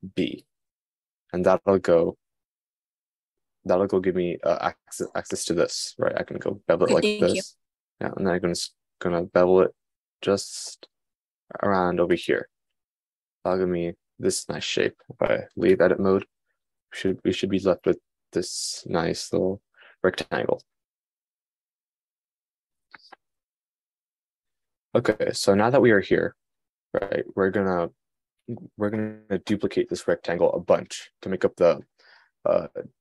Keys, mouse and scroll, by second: 0.6 super+b, 16.2 Tab.